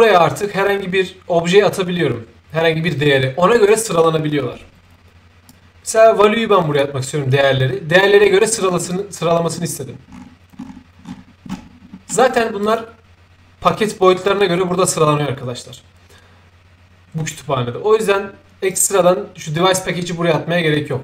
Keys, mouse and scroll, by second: 5.5-6.8 drag, 8.0-8.3 scroll up 4, 8.5-9.4 scroll down 2, 9.4-9.9 scroll up 2, 10.1-10.6 scroll down 2, 10.6-11.5 scroll down 1, 11.5 scroll up 2, 11.8 middle click, 12.0 middle click, 12.6 click, 18.7 click, 19.6-21.0 drag.